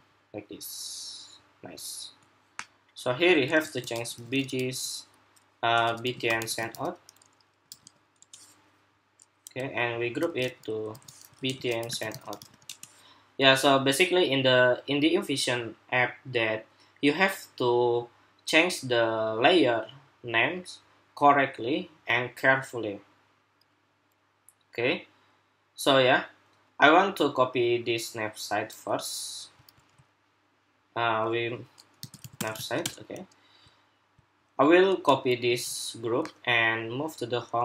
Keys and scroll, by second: 3.3 super+r, 10.2 super+g, 10.6 super+r, 29.4 super+s, 35.2 super+c, 37.4 super+v.